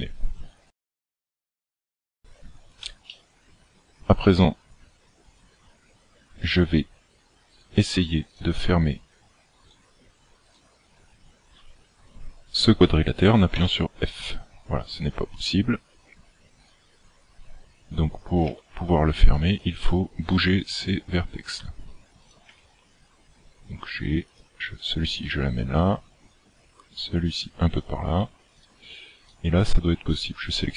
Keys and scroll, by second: 13.6 f, 18.6 g, 20.7 g, 22.6 g, 25.8 g.